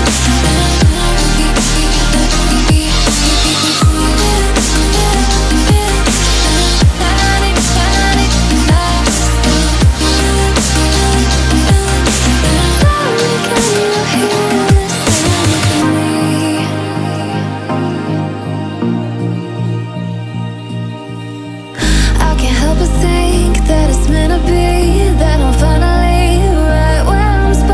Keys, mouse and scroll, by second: 8.1-8.5 alt+scroll down 2, 8.5-9.0 alt+scroll up 2, 9.0 click, 10.0-10.5 alt+scroll up 2, 10.5 click, 10.9-11.6 alt+scroll down 2, 11.6-12.0 alt+scroll down 1, 12.0 click, 14.6 click, 18.5-23.1 drag.